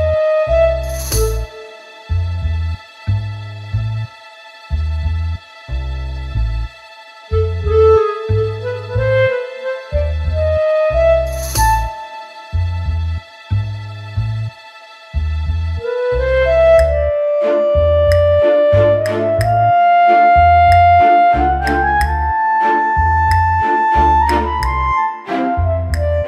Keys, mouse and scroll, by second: 0.6 click, 2.6 click, 7.6-8.2 scroll down 2, 8.0 middle click, 8.3-8.7 scroll up 4, 8.9 scroll down 2, 9.4 middle click, 10.9 click, 11.4-12.2 scroll down 5, 12.2 scroll down 4, 12.6 a, 13.3 click, 14.4-14.8 scroll up 4, 15.7 middle click, 16.0 scroll up 1, 17.2 click, 17.6 scroll down 2, 17.8 middle click, 18.2 Tab, 19.0 click, 22.6 click, 22.9 click, 23.1 click, 23.4 click, 23.6 click, 23.8 click, 25.4 middle click.